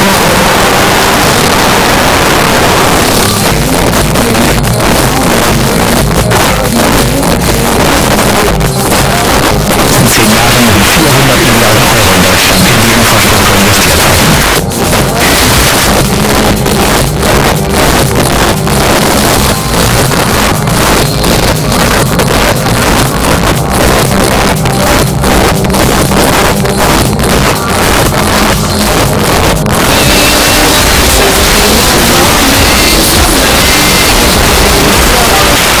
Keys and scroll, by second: 15.6 Page_Down, 35.6 Page_Down.